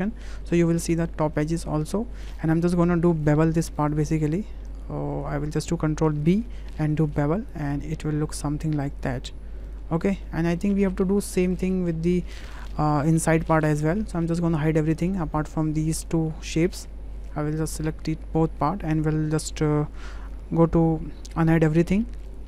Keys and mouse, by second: 0.4 click, 1.4 alt+shift+click, 1.8 click, 3.2 click, 3.8 alt+click, 4.2 click, 4.8 alt+shift+click, 5.1 alt+shift+click, 6.2 ctrl+b, 9.7 click, 9.9 Tab, 10.3 drag, 13.1 shift+h, 14.2-14.6 drag, 14.9 shift+click, 15.2 Tab, 16.0 click, 16.3 click, 17.6 click, 18.3 shift+click, 19.8 Tab, 21.1 alt+h.